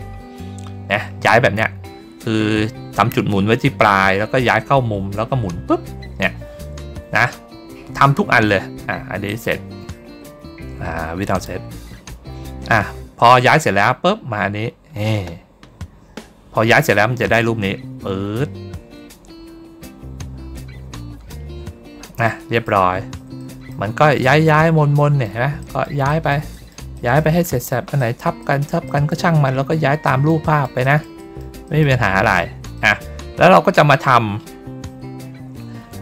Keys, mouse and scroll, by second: 0.0 ctrl+middle click, 9.2 click, 11.2 click, 13.1 click, 13.3 click, 22.2 middle click, 22.8 ctrl+scroll down 1, 23.3 middle click, 24.1 middle click, 24.9 middle click, 25.5 middle click, 26.0 middle click, 26.4 middle click, 26.8 middle click, 27.4 middle click, 27.9 middle click, 28.3 middle click, 28.8 middle click, 29.9 middle click, 30.3 middle click, 30.7 middle click, 31.1 middle click, 31.6 middle click, 32.6 middle click, 33.4 ctrl+scroll down 1.